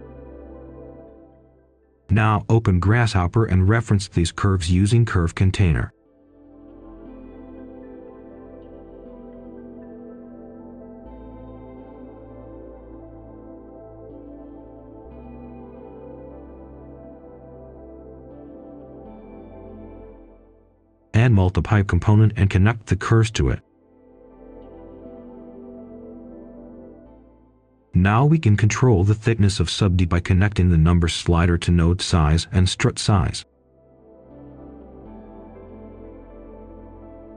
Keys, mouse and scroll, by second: 0.7-2.0 typing, 4.0 right click, 4.9 click, 5.5 scroll down 1, 5.8 scroll up 1, 6.0 right click, 6.7 scroll up 1, 7.0 right click, 7.6-8.5 typing, 9.3 right click, 9.9 shift+right click, 10.7 click, 11.4-12.5 typing, 13.5 right click, 14.2 click, 16.0 right click, 16.8 click, 17.7-18.2 scroll up 1, 18.8-19.1 typing, 19.3 right click, 20.3 click, 20.9-22.8 typing, 24.1-25.6 drag, 25.6 scroll up 1, 25.9 click, 26.2 typing, 27.2 Return, 28.4-29.5 scroll up 1, 29.5 click, 31.8 scroll up 1, 32.4-33.9 drag, 34.0 ctrl+right click, 35.2 click, 36.2 Return.